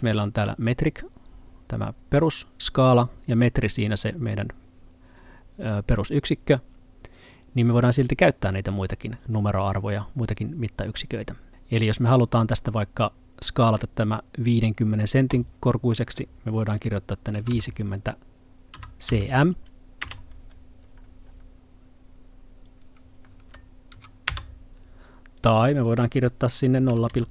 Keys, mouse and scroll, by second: 8.5 middle click, 15.4 click, 17.4 typing, 18.8-19.2 typing, 20.1 Return, 22.8 click, 24.0 2, 24.4 Return, 25.4 click, 26.8 0.